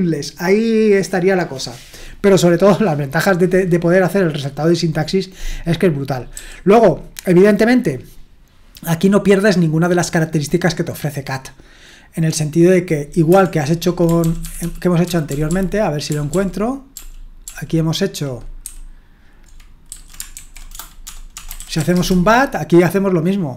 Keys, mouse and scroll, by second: 6.3 q, 14.2 ctrl+p, 14.4 ctrl+p, 14.6 ctrl+p, 15.0-17.5 ctrl+p, 18.7 ctrl+n, 19.9 ctrl+a, 20.4 alt+f, 20.7-22.3 typing.